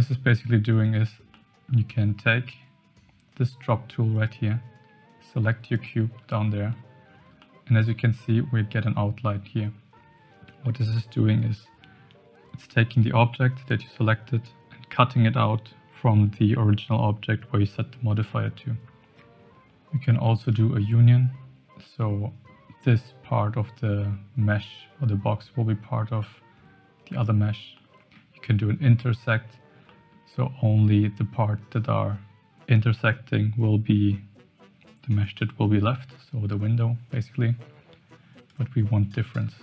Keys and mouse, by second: 1.3-1.7 middle drag, 4.1 click, 6.3-6.7 shift+middle drag, 7.4-7.7 shift+middle drag, 20.4 click, 22.0-22.5 middle drag, 27.1 click, 27.7-28.1 middle drag, 29.8-30.2 middle drag, 38.3 click, 39.1-39.5 middle drag.